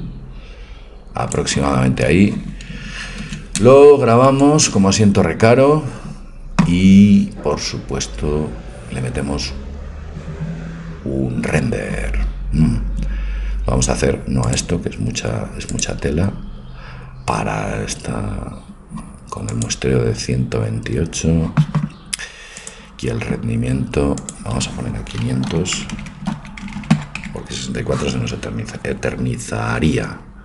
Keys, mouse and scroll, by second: 3.2 ctrl+s, 14.5-16.4 drag, 19.5-21.4 drag, 21.4-22.6 middle drag, 26.0 KP_0, 26.7 KP_0, 27.2 KP_0.